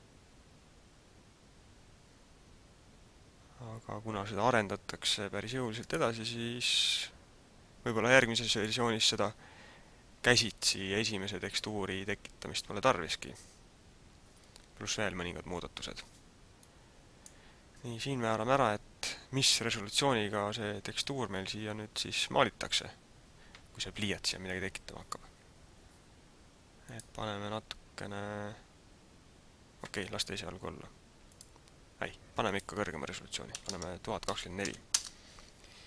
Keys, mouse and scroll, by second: 8.1 click, 16.8 click, 26.9 click, 32.6 click.